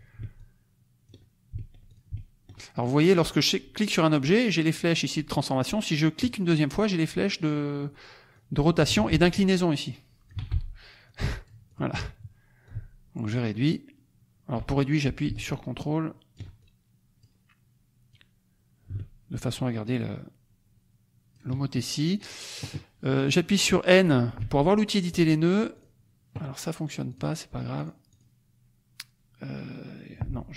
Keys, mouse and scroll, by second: 0.3 ctrl+click, 1.9 ctrl+click, 2.7 ctrl+click, 3.1 ctrl+click, 6.2 click, 8.3 click, 8.9 ctrl+z, 9.6 click, 10.4 ctrl+z, 11.0 click, 12.6 ctrl+click, 16.5 ctrl+click, 18.0 click, 19.9-21.6 ctrl+scroll up 2, 22.2 click, 24.3 n, 25.7 click, 27.0 click, 27.7 click.